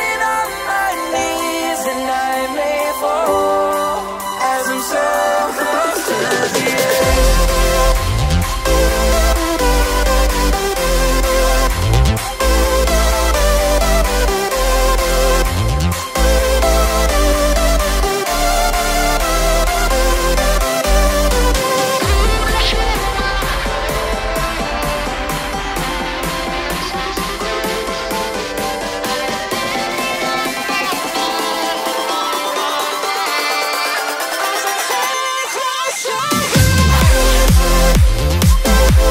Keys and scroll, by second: 4.7 ctrl+v.